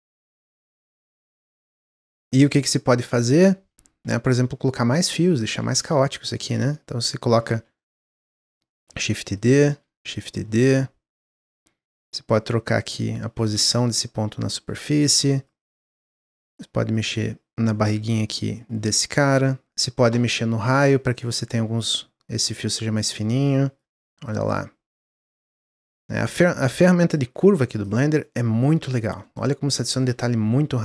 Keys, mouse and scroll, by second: 0.2 scroll down 1, 0.5 middle drag, 0.8 scroll up 1, 0.9-1.7 middle drag, 1.7 click, 2.0 Tab, 2.4 click, 3.9 shift+d, 5.5 shift+f, 6.4 shift+f, 6.9 middle click, 7.4 ctrl+z, 7.7 middle click, 8.6 shift+d, 9.6 shift+d, 11.7 click, 12.0 middle click, 12.7 click, 13.4 ctrl+z, 13.7-14.7 drag, 15.0 click, 15.9 middle click, 16.4-17.8 drag, 19.7 shift+click, 20.7-22.0 drag, 24.1 click, 25.1 shift+click, 26.1 click, 27.1 Tab, 27.5 middle click, 27.7 click, 28.1-30.2 middle drag, 30.2 Tab.